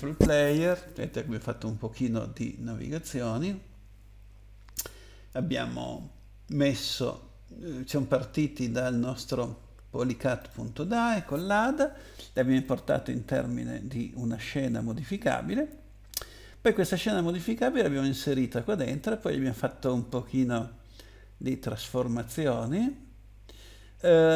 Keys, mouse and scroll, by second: 10.4 click, 12.6 click.